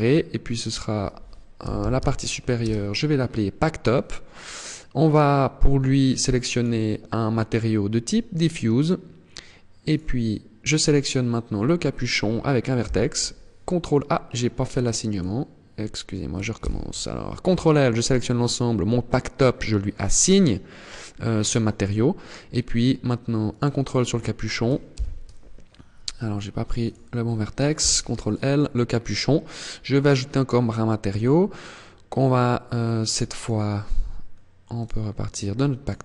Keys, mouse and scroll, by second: 4.5 click, 9.3 right click, 12.3 ctrl+l, 14.6 right click, 16.1 ctrl+l, 19.6 click, 23.0 right click, 24.4 ctrl+l, 26.3 right click, 27.3 ctrl+l, 29.5 click, 32.9 click, 35.3 click, 35.9 click.